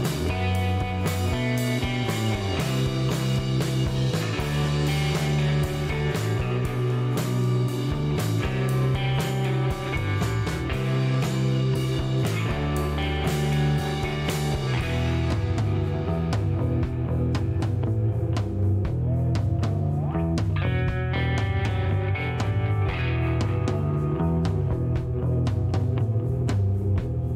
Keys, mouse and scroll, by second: 0.1 right click, 1.3 click, 1.8 click, 3.2 click, 4.7 KP_1, 4.8 KP_6, 5.0 KP_3, 5.2 KP_Enter, 6.7 click, 8.0 click, 8.7 KP_5, 9.1 KP_Enter, 10.6 click, 13.1 click, 13.7-14.5 typing, 15.5 click, 16.7 click, 17.9 scroll down 1, 18.1 middle click, 18.7 scroll up 1, 19.2 middle click, 20.4 click, 21.7 click, 22.0 right click, 22.6 middle click, 24.7 click, 26.1 click.